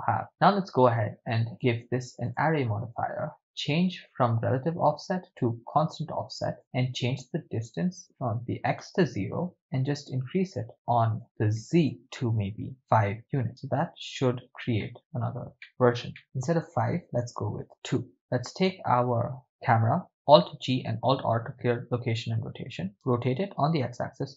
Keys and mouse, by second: 1.5 click, 2.2-3.4 drag, 5.2 click, 5.8 click, 6.6 click, 8.0-9.2 drag, 9.5-10.6 drag, 11.1 click, 12.0-13.2 drag, 13.5-14.5 ctrl+middle drag, 14.8-15.2 shift+middle drag, 15.7-16.0 ctrl+shift+middle drag, 17.2 click, 18.8 right click, 20.3 alt+g, 20.9 alt+r, 23.0 r, 23.6 x, 24.1 9, 24.2 0.